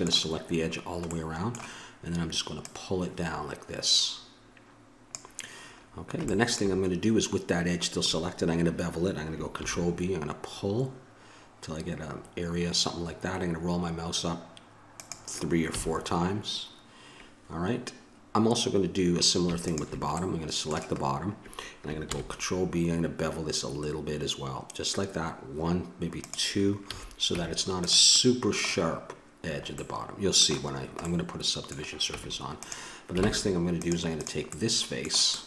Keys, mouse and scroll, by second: 2.5-4.3 drag, 9.6 ctrl+b, 15.7 a, 19.6 click, 20.2-22.0 middle drag, 22.0 ctrl+b, 26.8 a, 27.3 Tab, 32.1 Tab, 33.2 ctrl+Tab, 34.5-35.4 drag.